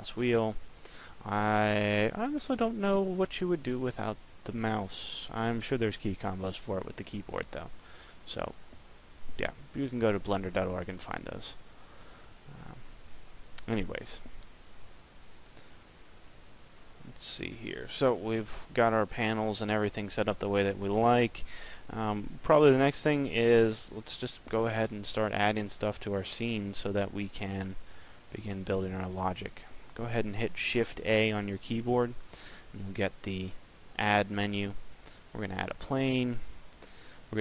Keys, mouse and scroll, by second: 0.8 middle click, 6.3 middle click, 7.3 middle click, 10.9 middle click, 31.1 shift+a.